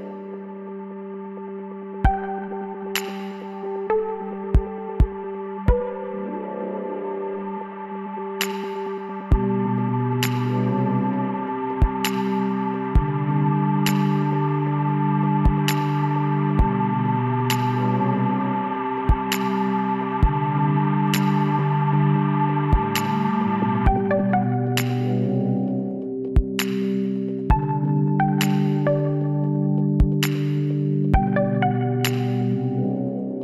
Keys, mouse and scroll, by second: 3.0-6.3 middle drag, 6.3 Tab, 8.5 KP_3, 9.7 middle click, 10.4-13.3 middle drag, 13.3 l, 13.9-16.5 middle drag, 15.0 s, 18.0 middle click, 18.2 Tab, 21.4-24.7 drag, 22.0 Tab, 23.7 l, 24.7 s, 28.9-30.0 middle drag, 29.9 Tab, 31.8 click, 32.7 a, 33.0 click.